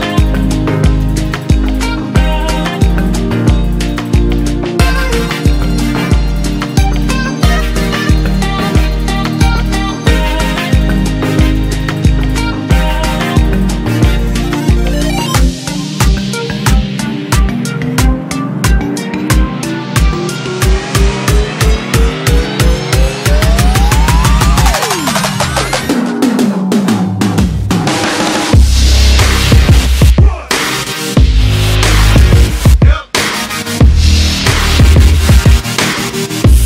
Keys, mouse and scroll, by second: 3.2 alt+m, 17.5 ctrl+r, 27.9 a.